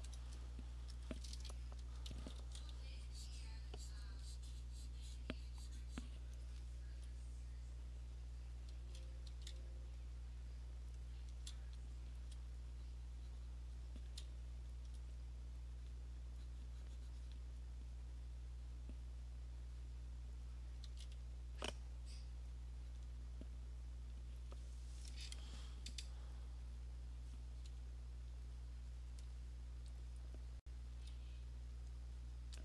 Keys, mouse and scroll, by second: 0.0 /, 1.1 alt+click, 2.2 [, 2.5 [, 3.6 click, 4.1 click, 4.3 alt+click, 6.4 click, 8.8 [, 9.3 [, 10.1 click, 10.3 click, 10.8 click, 11.3 click, 12.0 alt+click, 12.2 alt+click, 12.3 click, 12.5 alt+click, 14.1 click, 14.9 alt+click, 16.0 click, 17.5 click, 19.1 click, 20.5 click, 20.8 click, 20.9 [, 23.0 click, 24.5 click, 27.9 click, 29.1 click, 30.1 alt+click, 30.9 click.